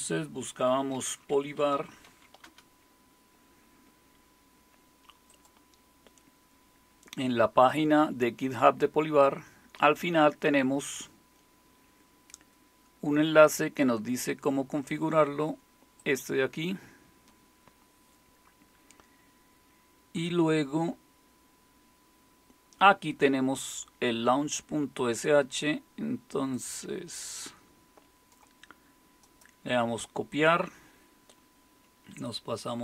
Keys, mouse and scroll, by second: 0.7-2.6 typing, 5.3-11.0 drag, 11.0-12.1 scroll down 1, 12.1-13.1 scroll down 1, 13.1-15.8 scroll down 1, 15.8 scroll down 1, 16.0-17.4 drag, 18.7-20.8 scroll down 1, 20.8-21.4 scroll down 1, 21.4-23.9 scroll down 1, 23.9-26.5 scroll down 1, 26.5-32.6 drag, 32.6 super+2.